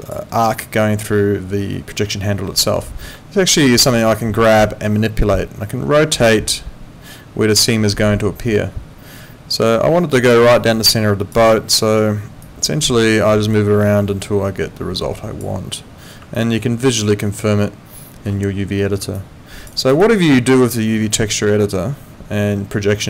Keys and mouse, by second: 4.4 click, 10.5 alt+click, 11.5 alt+middle click, 12.4 click, 16.3 alt+middle click, 19.1 alt+click, 19.7 alt+right click, 20.0 alt+click.